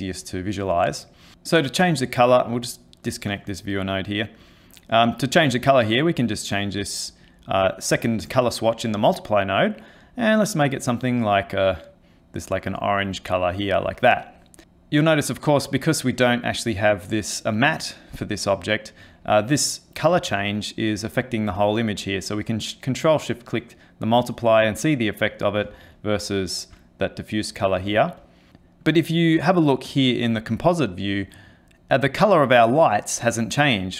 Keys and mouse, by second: 2.7 ctrl+right click, 4.4 click, 5.6 click, 14.6 middle click, 15.4 middle click, 18.6 middle click, 20.6 ctrl+shift+click, 25.9 ctrl+shift+click, 28.2 ctrl+shift+click, 28.5 ctrl+shift+click, 28.8 middle click.